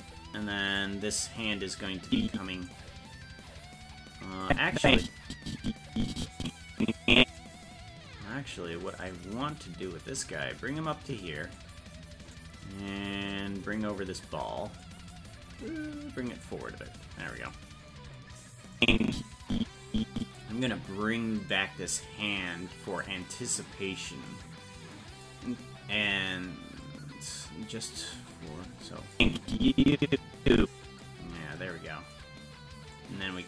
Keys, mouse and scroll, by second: 0.7-2.1 right drag, 2.1 click, 4.4-7.4 drag, 9.0-11.6 drag, 12.4 right click, 13.3-14.8 drag, 16.4-17.5 drag, 18.8-20.4 drag, 21.5 right click, 24.3 click, 26.8-28.2 drag, 29.1-31.0 drag, 32.9-33.4 drag.